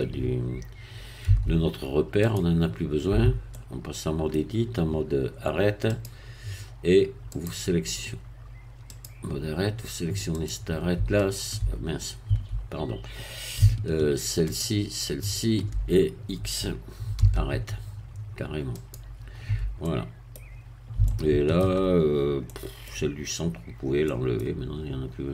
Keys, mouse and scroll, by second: 1.3 Tab, 2.3 click, 3.1 Tab, 3.5 middle click, 5.9 click, 8.9 click, 10.4 click, 10.9 Tab, 12.3 Tab, 14.5-15.7 shift+drag, 17.1 x, 18.7-19.8 drag, 19.8 middle click, 21.1 shift+middle click, 22.1-22.5 shift+scroll up 1, 22.5 middle click, 23.7-24.0 scroll up 1, 24.0 middle click.